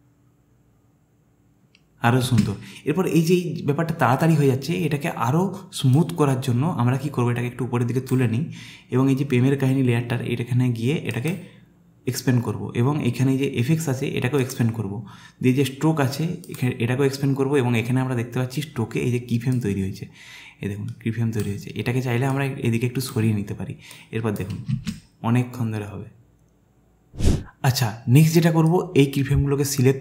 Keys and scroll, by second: 2.4 space, 24.9 space.